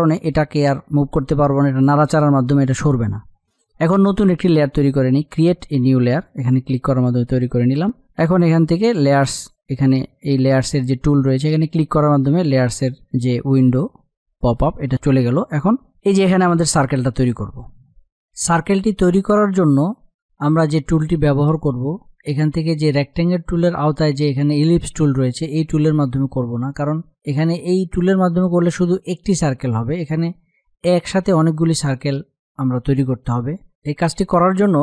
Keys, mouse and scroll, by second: 6.8 click, 9.6 click, 15.8 click, 33.3 F8.